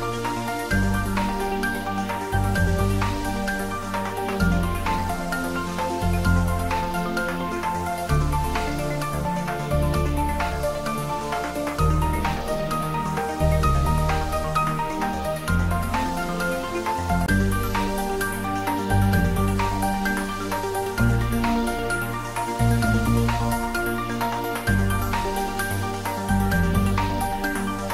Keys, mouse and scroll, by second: 0.6 shift+d, 1.0 z, 3.1 click, 3.5-5.3 scroll up 2, 7.0 click, 9.9 s, 12.5 click, 13.1 s, 13.4 x, 15.0 click, 16.1 scroll down 1, 16.9-18.4 middle drag, 19.2-19.6 scroll up 1, 19.6-20.5 middle click, 20.9-21.2 scroll up 1, 21.2-22.7 middle drag, 23.8 click, 25.4 g.